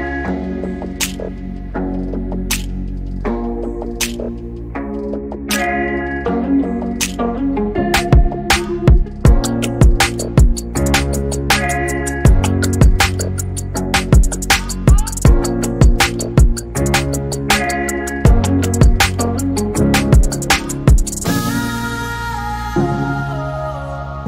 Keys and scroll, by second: 4.3-6.0 typing, 7.4 t, 11.0-12.1 typing, 13.7 r, 15.9 space, 16.7 f, 17.9-18.3 typing, 19.8 typing, 21.0-22.0 typing, 23.6 e.